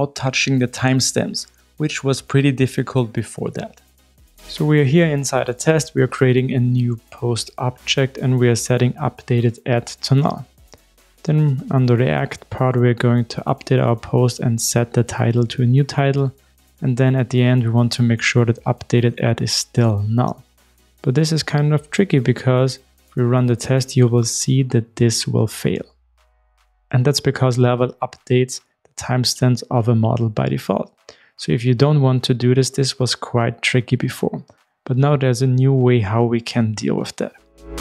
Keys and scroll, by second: 22.8 ctrl+shift+r, 28.2 shift+super+F12.